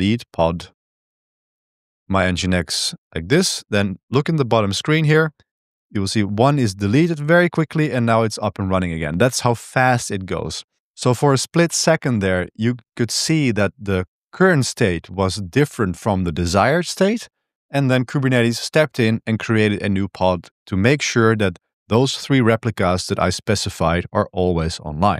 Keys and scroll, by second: 0.0-0.7 typing, 1.4 Tab, 2.3 Tab, 2.6 Tab, 2.9 Return, 5.2 Return.